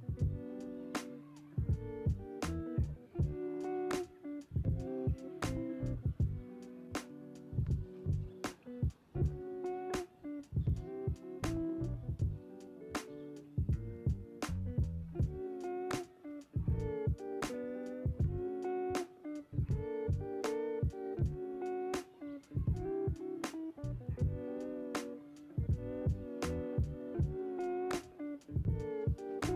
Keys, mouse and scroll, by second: 0.1 scroll down 3, 0.8-2.1 middle drag, 2.1 Tab, 2.7 click, 3.3 scroll down 1, 3.4 click, 12.7-15.1 middle drag, 15.1 click, 16.8-17.9 drag, 17.9-19.5 middle drag, 19.5-20.5 scroll down 1, 20.5 scroll down 1, 26.2-28.2 middle drag, 28.2 click.